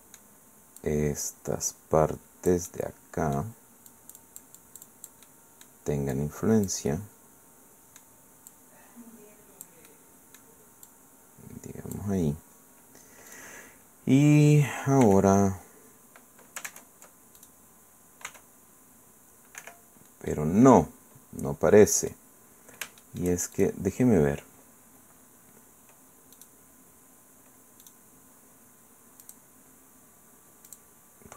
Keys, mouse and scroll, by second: 0.8-3.6 drag, 3.9-5.8 drag, 6.1-7.9 drag, 7.9 middle click, 8.5-9.8 drag, 10.4 middle click, 10.9-12.1 drag, 12.3-13.0 scroll down 1, 13.3 middle click, 15.0 r, 16.7 ctrl+Tab, 17.4 ctrl+click, 18.3 r, 19.6 Escape, 20.3-22.3 drag, 22.4 middle click, 23.0 shift+middle click, 23.5 shift+click, 26.3 click, 27.8 middle click, 29.2 click, 30.7 click.